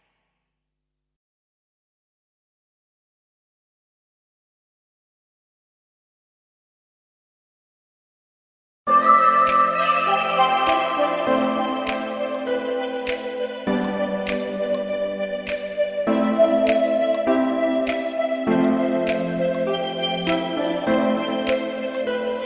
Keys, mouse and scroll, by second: 2.1 click, 2.8-3.1 scroll down 3, 3.1 scroll up 1, 3.4 scroll down 1, 3.9 click, 4.3 scroll down 1, 5.9 shift+d, 8.9 click, 9.3 scroll up 1, 9.8 click, 11.3 s, 12.6 Tab, 14.1 scroll down 1, 14.6 click, 14.6 scroll down 2, 16.0 click, 18.0 x, 20.5 click, 21.1 scroll up 1, 21.7 Tab, 22.2 click.